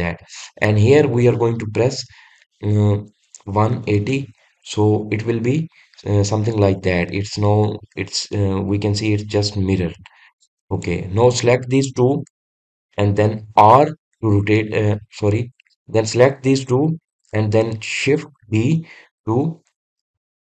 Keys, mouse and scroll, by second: 11.7 drag, 12.2 click, 13.4 shift+click, 14.6 r, 19.5 shift+d.